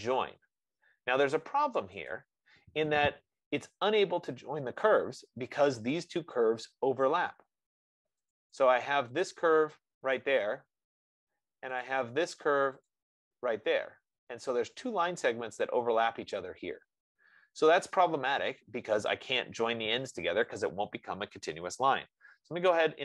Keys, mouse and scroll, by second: 2.5 click, 8.8 click, 9.6 click, 12.1 click, 13.1 click, 14.3 F15, 17.5 click.